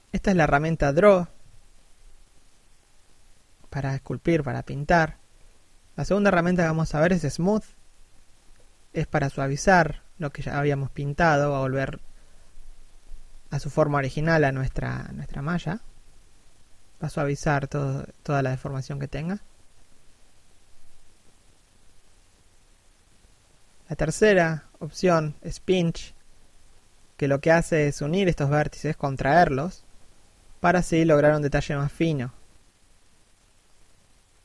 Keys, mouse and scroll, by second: 1.3 scroll up 1, 1.8 middle click, 2.4 click, 3.3 click, 4.1 middle click, 7.2 click, 12.6 f, 13.2 click, 14.6 shift+f, 15.2 click, 20.9 middle click, 21.2 scroll up 1, 24.2 f, 24.6 click, 24.8 middle click, 25.6 click, 33.4 middle click.